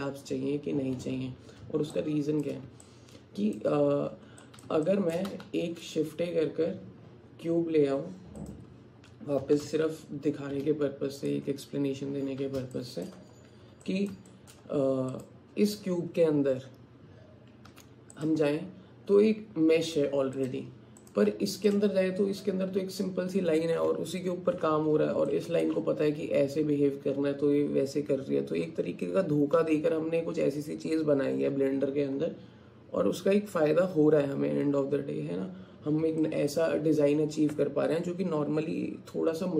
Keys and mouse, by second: 2.0 shift+click, 2.9 alt+click, 4.4 alt+click, 4.9 alt+shift+click, 5.5 shift+a, 9.4 g, 12.7 shift+middle click, 13.9 alt+middle click, 14.3 alt+shift+middle click, 17.7 Tab, 25.4 alt+shift+click, 36.3 alt+click.